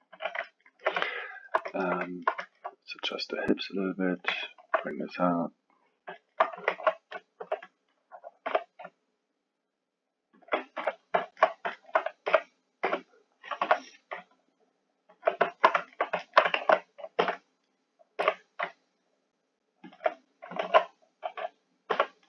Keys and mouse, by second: 0.1 KP_1, 0.4-3.1 ctrl+middle drag, 3.1 click, 4.4 alt+middle click, 5.2 click, 6.2 alt+middle click, 6.7 alt+a, 7.4 b, 8.5 g, 10.7 KP_3, 11.2-12.2 alt+middle drag, 12.2 g, 15.5-16.6 ctrl+alt+middle drag, 16.6 alt+a, 17.2 b, 18.2 g, 20.6 alt+a, 21.9 b.